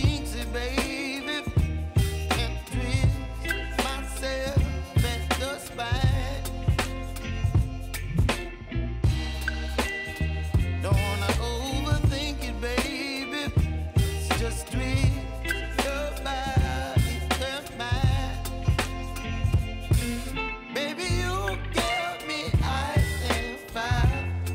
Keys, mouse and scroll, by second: 5.8-11.8 drag, 11.8 u, 12.9 space, 14.8 click, 15.6 space.